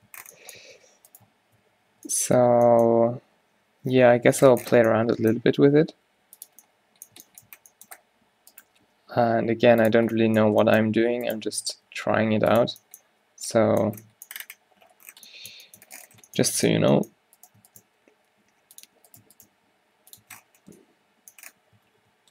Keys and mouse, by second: 0.1 Tab, 0.7 Tab, 1.7-3.4 typing, 4.4 ctrl+z, 6.3 g, 8.8-10.2 drag, 10.2 Tab, 11.6 Tab, 11.6 f, 11.9 g, 12.8 Tab, 16.9 Tab, 17.9 click, 17.9 g, 19.5 g, 19.7 click, 20.3 Tab, 22.1 ctrl+z.